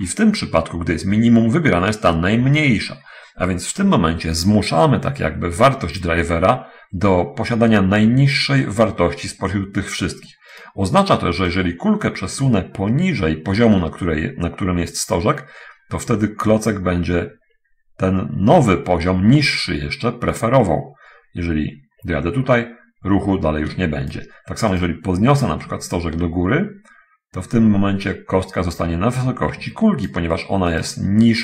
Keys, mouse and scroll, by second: 0.3 middle click, 9.3 right click, 11.9-24.4 drag, 25.1 ctrl+right click, 25.9-30.4 ctrl+drag, 31.1 right click.